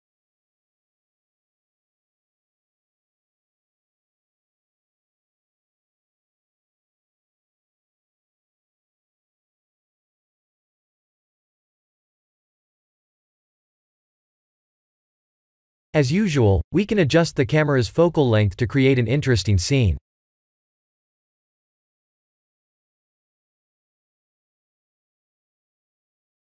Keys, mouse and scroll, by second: 2.0 click, 4.0-5.7 middle drag, 6.5 click, 7.3 ctrl+a, 11.3 scroll down 3, 11.8-13.5 middle drag, 13.7 scroll up 2, 14.8 KP_0, 16.5 shift+`, 17.6 w, 18.1 w, 18.1 a, 19.3 d, 19.8 s, 20.4 a, 21.6 s, 23.6 w, 24.2 w, 24.8 w, 25.1-26.0 s.